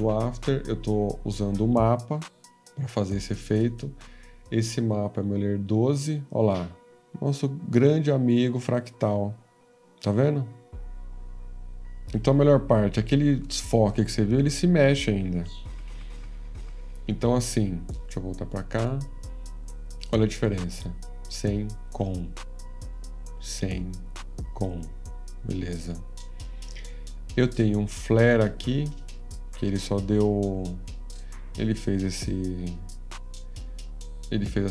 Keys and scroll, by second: 8.6 F13, 15.3 F14, 32.8 F14, 32.8 F13, 32.8 /, 32.8 =.